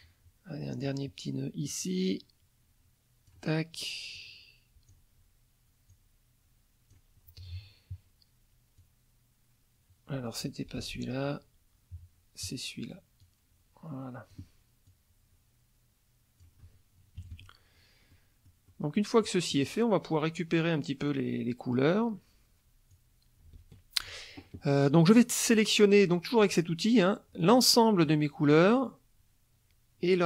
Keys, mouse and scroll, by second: 1.7-3.5 drag, 4.2 click, 5.9-7.1 drag, 8.8-10.6 drag, 10.8 ctrl+z, 13.2-14.5 drag, 14.8-16.6 drag, 17.2 KP_Subtract, 18.1 middle click, 18.7 middle click, 19.2 middle click, 22.9-24.2 drag, 26.4 click, 27.4 click.